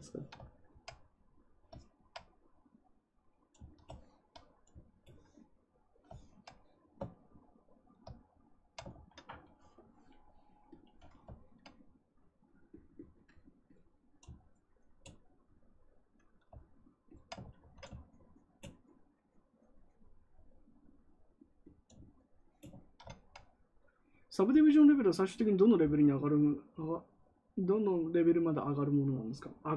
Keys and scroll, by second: 8.9 ctrl+z, 17.4 ctrl+z, 17.6 ctrl+z.